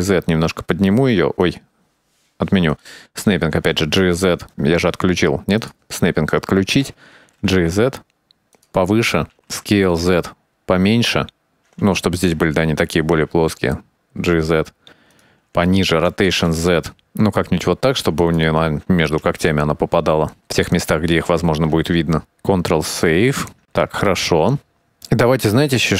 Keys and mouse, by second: 3.6 g, 7.4 g, 7.5 g, 9.6 s, 13.3 g, 16.3 r, 19.3 alt+a, 22.6 ctrl+s, 23.9-24.5 shift+middle drag, 25.0-25.9 drag.